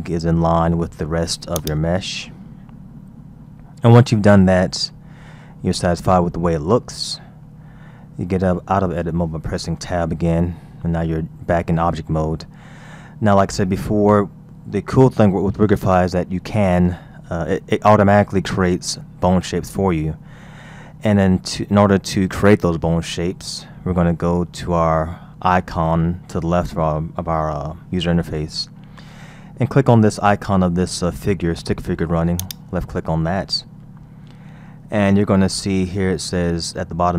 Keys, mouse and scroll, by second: 0.2-1.6 scroll up 3, 1.6 click, 2.4-2.7 scroll up 5, 2.8-4.1 scroll down 5, 4.1-4.5 scroll down 2, 4.5-5.7 scroll up 3, 5.7-6.2 scroll up 2, 6.2-6.6 scroll down 2, 10.1 Tab, 12.1-12.8 scroll down 3, 13.0-16.2 scroll up 3, 32.4 click, 33.5-34.2 scroll down 3, 36.1-37.1 scroll down 3.